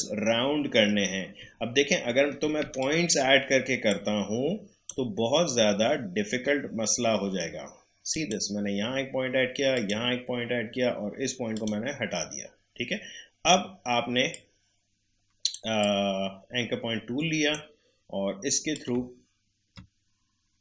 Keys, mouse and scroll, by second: 1.2 scroll up 2, 1.8-2.4 alt+scroll up 2, 2.4 alt+scroll up 1, 2.6 space, 2.8 click, 3.1 space, 3.8-8.1 drag, 14.3-18.9 drag.